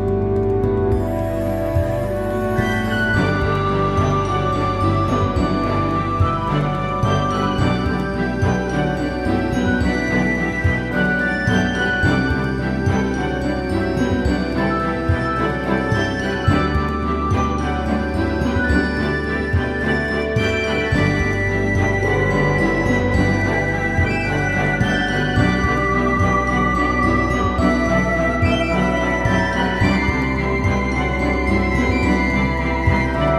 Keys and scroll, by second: 2.6 super+t, 8.9 Return, 18.6 super+t, 22.9 shift+Return.